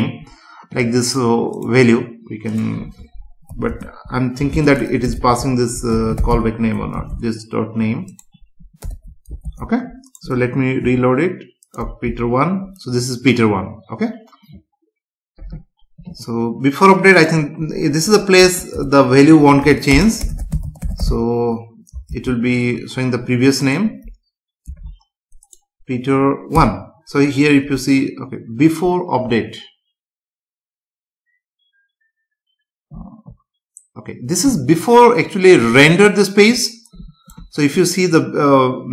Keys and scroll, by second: 3.5 Left, 3.7 space, 4.5 shift+space, 6.9 ctrl+s, 8.8 Return, 9.5 ctrl+s, 10.8 F5, 18.0 Right, 18.4 space, 18.7 Return, 19.9 space, 22.0 ctrl+s, 24.7 F5.